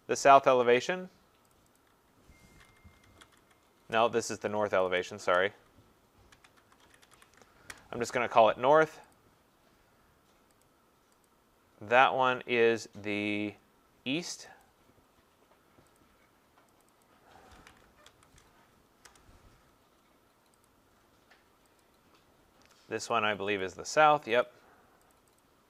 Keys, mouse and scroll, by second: 0.0-0.3 typing, 0.9 click, 1.5 click, 1.8 click, 2.4-4.9 typing, 6.1-8.7 typing, 9.1 click, 10.6 click, 11.2 click, 14.6 click, 16.0 click, 16.8 click, 17.0 click, 17.3-18.5 typing, 19.1 Return, 20.7 click, 21.8 click, 22.5 typing, 23.1 click, 23.6 click, 24.4 click, 25.1 click, 25.4 click.